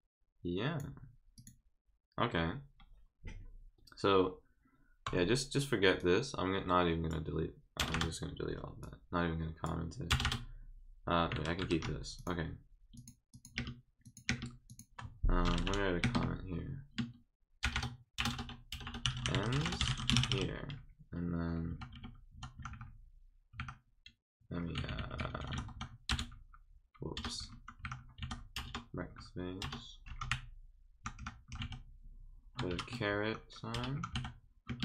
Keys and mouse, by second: 1.3 click, 6.0-7.1 drag, 8.8 click, 12.2 click, 12.9 click, 13.3 click, 13.5 space, 14.0 click, 14.7 click, 18.8-20.8 typing, 32.7 6, 34.6 space.